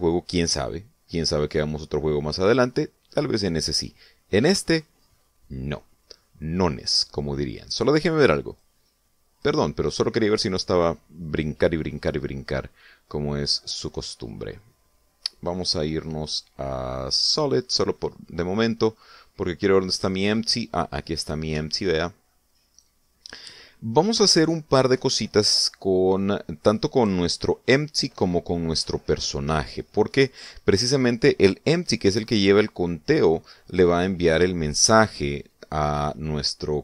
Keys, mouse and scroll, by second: 9.3 click, 10.1 click, 12.9 scroll down 1, 13.5 middle click, 16.1 click, 18.1 click, 18.7-19.3 scroll down 2, 19.7-20.9 middle drag, 21.1 scroll up 2, 21.5 middle click, 22.4 shift+middle click, 23.5 right click.